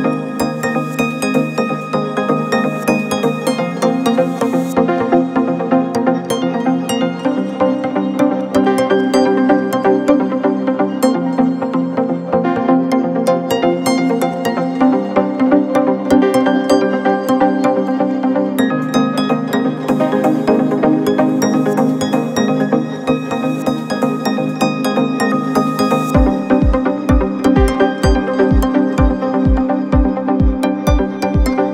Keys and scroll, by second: 2.5 ctrl+z, 8.7 ctrl+z.